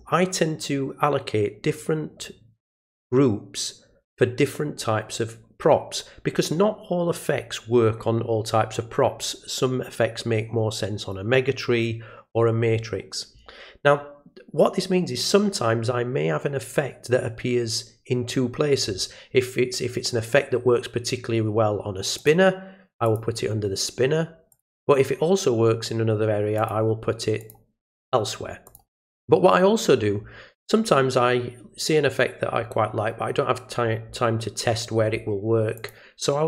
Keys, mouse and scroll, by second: 22.2 click, 23.0 click, 24.5 click, 26.6 click, 27.4 click, 28.7 click, 35.8 click.